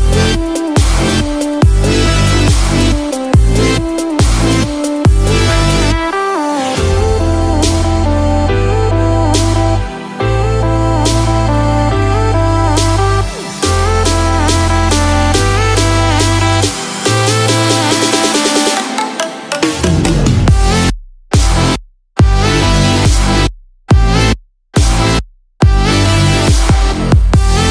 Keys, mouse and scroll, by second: 1.6 ctrl+z, 1.6 click, 3.4 click, 7.4 click, 9.5 ctrl+z, 10.7 click, 10.7 middle click, 10.7-11.1 scroll down 8, 11.5-12.2 scroll up 2, 11.9 shift+middle click, 12.2 middle click, 13.6-16.4 scroll down 3, 16.4 scroll up 1, 17.1 shift+middle click, 17.1 scroll up 1, 22.9 middle click, 22.9 click, 22.9 scroll down 6.